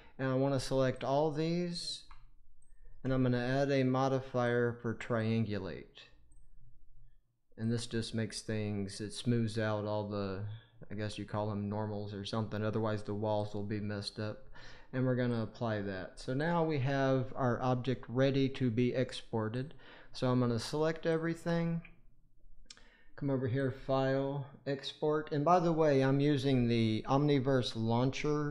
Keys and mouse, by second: 4.3 click, 5.1 click, 6.3-7.7 drag, 13.3-15.3 drag, 23.6-24.8 drag, 27.2 click.